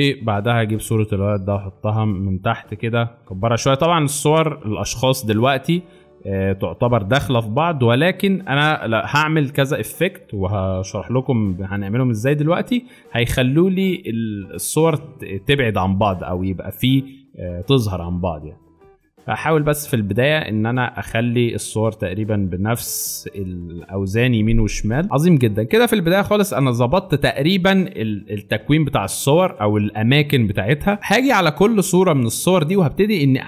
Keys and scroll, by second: 3.0 ctrl+t, 8.1 Return, 10.9 ctrl+t, 23.2 Return, 29.5 alt+shift+space, 31.0 alt+shift+space.